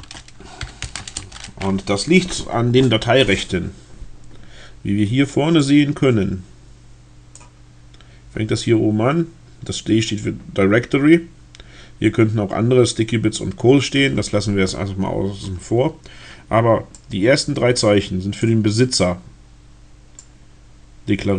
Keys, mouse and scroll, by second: 0.0-1.0 typing, 1.1 Return, 5.5-7.5 drag, 17.0-18.7 drag, 20.3-21.3 drag.